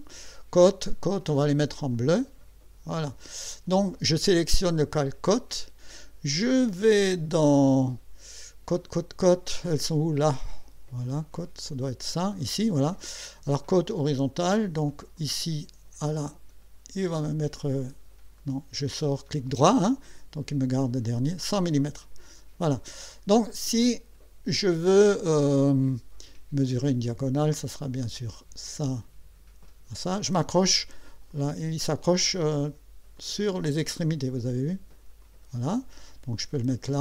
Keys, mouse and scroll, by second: 0.0-0.1 typing, 0.5 click, 1.9 click, 2.9 click, 10.4 click, 11.3 click, 13.8 click, 15.2 click, 16.3 click, 18.4 right click, 20.8 click, 22.4 click, 27.3 click, 28.7 click, 31.3 click, 33.2 click, 35.2 click.